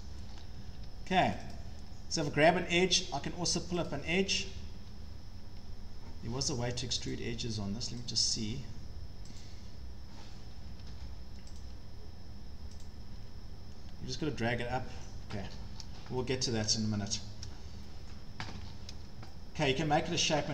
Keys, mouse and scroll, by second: 0.6 Escape, 0.8 Escape, 1.4 click, 1.5 click, 2.3 click, 3.9 click, 4.8 Escape, 7.1 click, 8.1 click, 9.4 click, 10.7 Escape, 10.9 Escape, 11.6 click, 12.8 click, 15.1 Escape, 15.4 Escape, 15.5 Escape, 15.5 scroll down 9, 16.3 scroll, 17.5 scroll, 18.1 scroll, 18.5 Escape, 18.6 Escape, 18.7 scroll, 19.8-20.5 scroll.